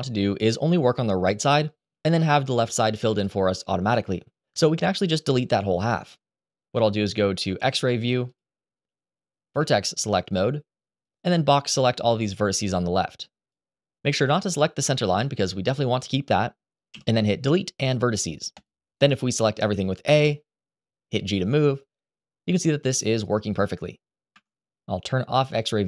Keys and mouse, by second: 4.8 KP_1, 7.5 click, 8.0 click, 9.3 1, 10.8-13.2 drag, 16.6 Delete, 19.8 a, 20.9 g, 24.1 Escape.